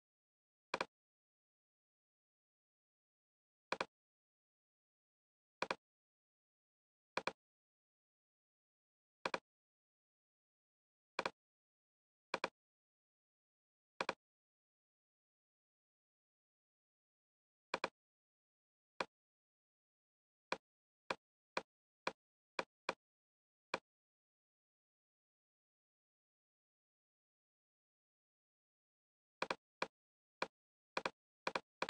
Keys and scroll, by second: 26.0 super+d.